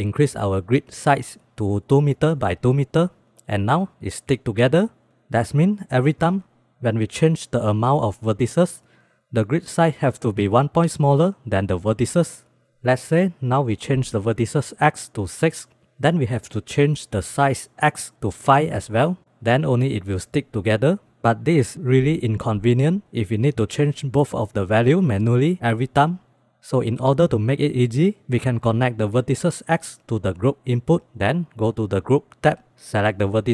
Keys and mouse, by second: 13.7 click, 13.9 click, 14.1 click, 16.5 click, 16.7 click, 16.9 click, 17.4 click, 17.9-19.2 drag, 26.7-27.2 middle drag, 27.7-28.5 drag, 29.3-30.0 drag.